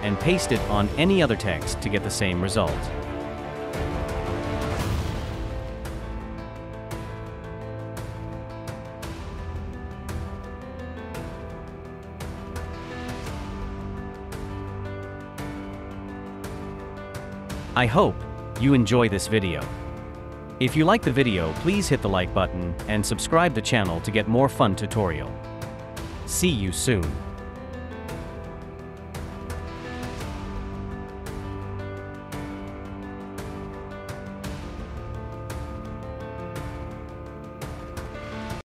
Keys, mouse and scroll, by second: 0.3 right click, 5.8-7.2 typing, 14.8 ctrl+click, 18.0 right click.